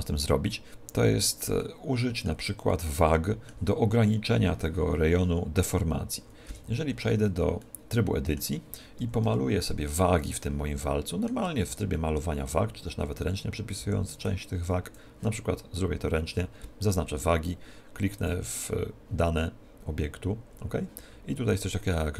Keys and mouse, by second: 7.1 Tab, 7.7-9.5 middle drag, 9.1 a, 9.3 KP_1, 9.5 middle click, 10.4-14.3 middle drag, 11.8 z, 13.9 b, 18.2 click.